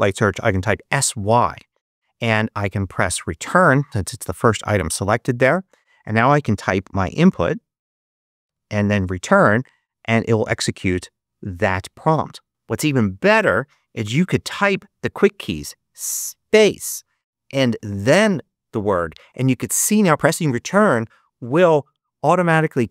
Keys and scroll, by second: 0.1-1.0 typing, 4.8 Return, 6.3-7.7 typing, 8.4 Return, 14.3-16.1 typing, 17.2-18.7 typing.